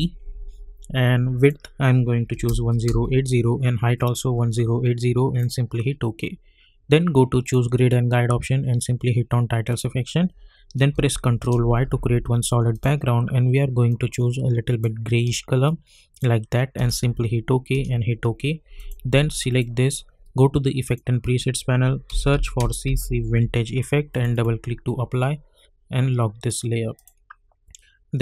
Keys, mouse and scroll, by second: 1.4 click, 5.4 click, 9.7 click, 10.9 ctrl+y, 12.7-16.7 drag, 16.7 Return, 18.7 click, 22.0-23.7 typing, 24.1 click.